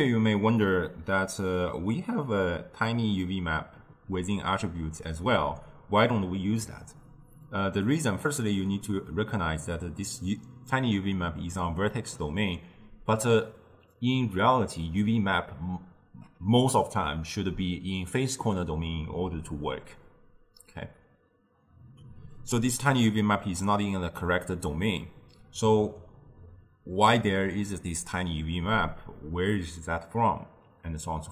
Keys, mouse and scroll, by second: 1.1 ctrl+alt+shift+q.